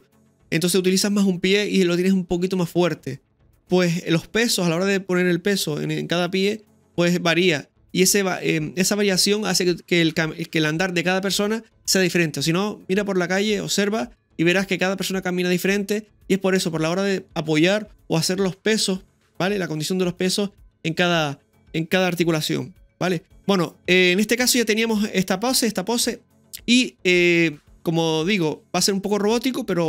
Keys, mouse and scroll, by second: 23.4-27.4 scroll down 1.